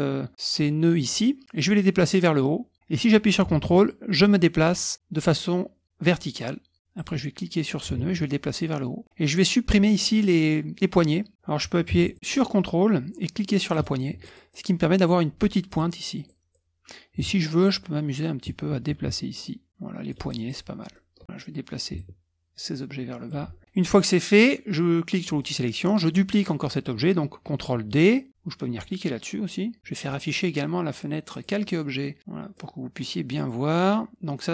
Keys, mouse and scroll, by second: 2.0-7.5 drag, 7.7-9.0 drag, 12.0 ctrl+click, 13.7 ctrl+click, 14.2 ctrl+click, 15.7-16.8 drag, 17.6 ctrl+click, 19.1-20.2 ctrl+drag, 20.3 ctrl+click, 20.9 middle click, 21.2 click, 21.9-23.6 ctrl+drag, 25.2 click, 30.0 click, 31.3 click, 32.2 click.